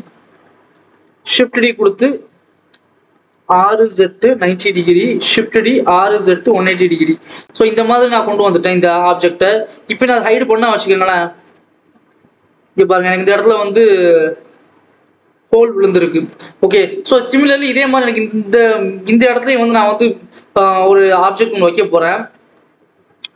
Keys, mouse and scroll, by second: 0.1-1.2 scroll down 1, 1.2 shift+d, 3.4 r, 5.1 shift+d, 5.8 r, 7.1 Tab, 7.4 scroll up 2, 7.6 alt+a, 8.3 click, 8.9-9.9 scroll up 1, 9.9 click, 10.2-10.7 scroll up 1, 10.7-11.4 scroll down 2, 11.4 click, 11.8 click, 12.1 scroll up 1, 12.4 scroll down 1, 12.6 alt+a, 12.9-13.2 scroll up 1, 13.2-13.9 scroll down 1, 13.9 click, 15.6-16.0 scroll up 1, 16.0 ctrl+s, 16.3-16.9 scroll down 1, 18.3-21.3 scroll down 1, 21.4-21.9 scroll down 1, 22.0 KP_7, 22.5 ctrl+s.